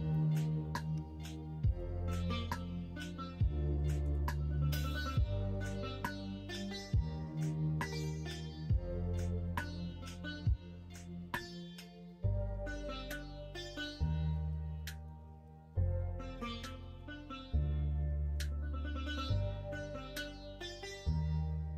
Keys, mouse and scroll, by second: 0.1-1.7 middle drag, 4.9-7.2 middle drag, 7.2 middle click, 7.6 middle click, 8.8 middle drag, 9.6-13.1 middle drag, 13.6-14.3 middle drag, 14.8 middle drag, 16.0 middle drag, 16.3 Tab, 17.5 2.